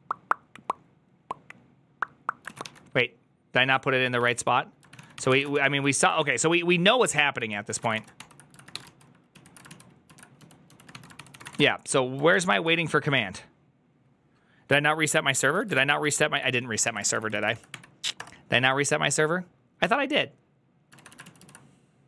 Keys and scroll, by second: 3.8-5.8 typing, 4.8 ctrl+w, 6.0 ctrl+n, 6.9 ctrl+t, 7.2 ctrl+s, 7.4-8.6 typing, 8.7 ctrl+u, 9.2 ctrl+u, 9.5 ctrl+u, 10.0-12.4 typing, 12.2 ctrl+a, 15.6 ctrl+a, 15.6 ctrl+u, 15.6 [, 15.9 ctrl+u, 16.7 shift+a, 16.9 ctrl+c, 17.1 ctrl+c, 17.3 ctrl+c, 18.0 Up, 18.0 Return, 21.1 ctrl+a, 21.1 ctrl+u, 21.1 [, 21.2 ctrl+u.